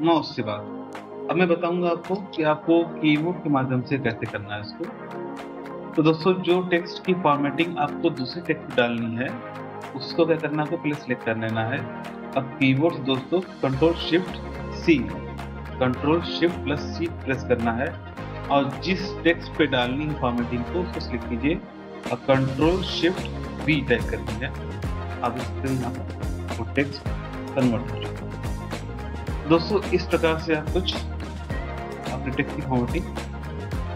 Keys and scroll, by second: 0.9 ctrl+z, 14.7 ctrl+shift+c, 23.6 ctrl+shift+v, 31.8 ctrl+shift+v, 32.0 BackSpace.